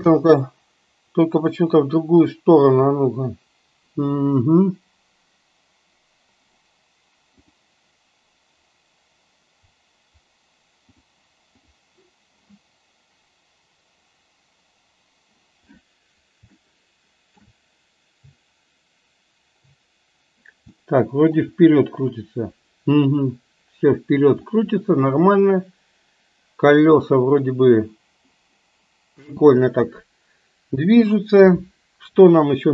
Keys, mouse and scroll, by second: 0.1 space, 11.1 click, 16.6-17.6 shift+middle drag, 20.8-21.5 shift+middle drag, 24.6-25.2 shift+middle drag, 29.4 space.